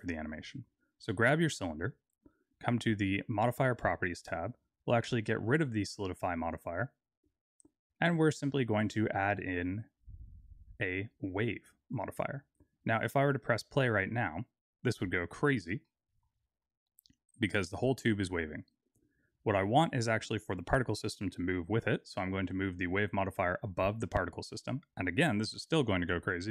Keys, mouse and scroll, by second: 3.5 click, 5.7 click, 7.4 click, 7.9 click, 8.7 click, 14.8 click, 16.0 middle click, 16.7-17.4 scroll down 2, 17.4 scroll down 2, 18.8 click, 22.1 click, 22.9 click, 24.2 middle click, 25.9 click.